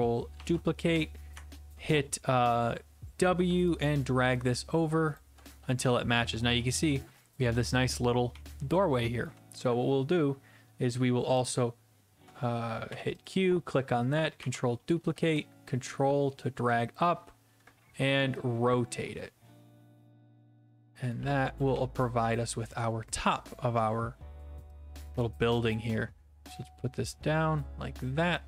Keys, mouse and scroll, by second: 0.3 ctrl+d, 1.3-1.9 typing, 5.1 ctrl+click, 5.8-9.1 typing, 9.2 middle click, 11.4 click, 12.9 q, 13.3 click, 14.4 ctrl+d, 16.9 ctrl+click, 20.9 ctrl+click, 21.2 f, 21.7 d, 22.2-23.5 d, 23.5 right click, 25.6 click.